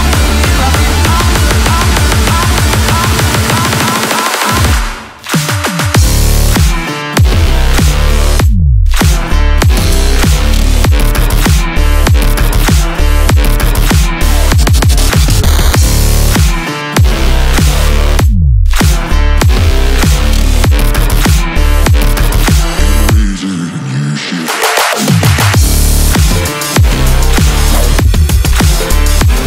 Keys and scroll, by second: 2.5 r, 2.7 Down, 3.5 Down, 3.9 Up, 4.1 Down, 4.4 Down, 4.6 Down, 4.8 shift+r, 5.0 Down, 5.7 Up, 5.9-8.0 typing, 7.5 super+t, 7.6 Return, 8.3 Return, 8.6 super+t, 9.0 Return, 9.7 super+t, 9.7 super+a, 9.9 super+v, 10.0 d, 13.6 Return, 13.9 super+t, 14.6 shift+Return, 16.9-20.2 typing, 20.2 super+z, 21.8 z, 22.5 space, 22.8 shift+super+4, 25.4 super+a, 25.9 super+v, 26.1 super+t, 26.5 Return, 26.7 super+s, 29.3 super+a.